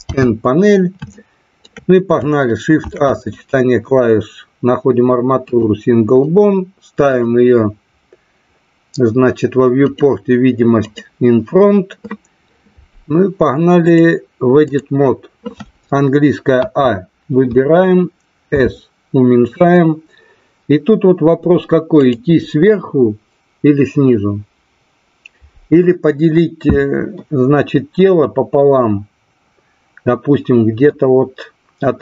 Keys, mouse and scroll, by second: 1.0-1.6 shift+middle drag, 2.7 shift+a, 7.0 click, 9.8 click, 13.8-14.8 drag, 18.6 s, 21.9 click.